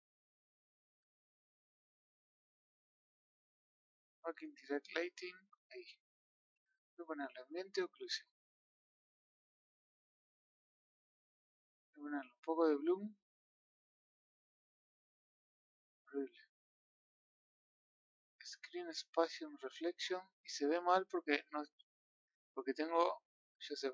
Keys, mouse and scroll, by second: 4.5 click, 5.2 middle click, 5.6 scroll up 1, 7.4-9.4 drag, 9.4-9.8 middle drag, 9.8-10.1 scroll up 8, 10.9 scroll down 5, 13.0-18.1 drag, 18.7-19.3 middle drag, 19.3-20.2 scroll up 5, 20.4-23.0 middle drag, 23.0 KP_0.